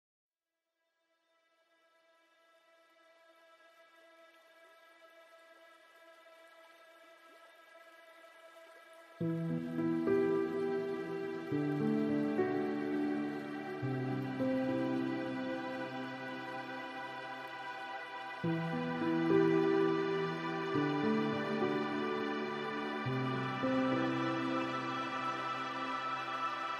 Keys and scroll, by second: 0.2 ctrl+alt+s.